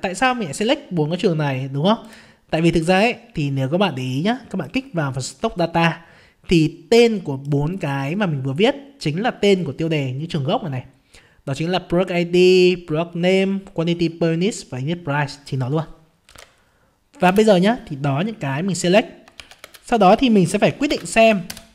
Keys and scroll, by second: 16.3 alt+Tab, 16.9 alt+Tab.